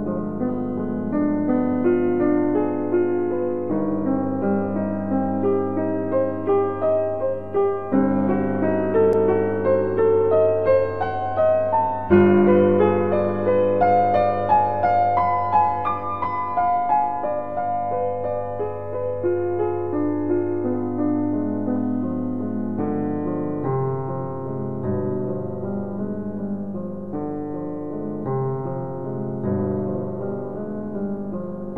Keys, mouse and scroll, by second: 2.2 click, 17.1 click, 23.1 click, 27.5 click.